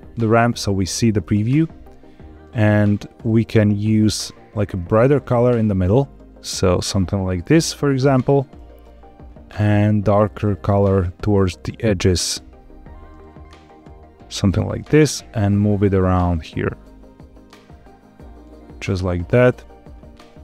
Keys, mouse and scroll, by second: 3.1 click, 3.8 click, 9.4 click, 9.9 click, 15.4-18.9 drag, 19.3 click.